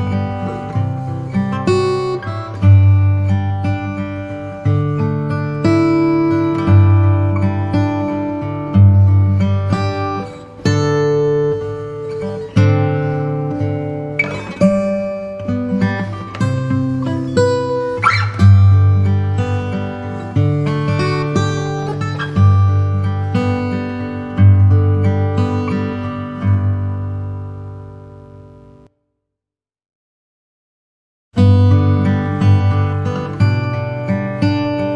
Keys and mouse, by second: 0.8-2.7 drag, 15.9-17.2 drag, 23.7 click, 32.6 click.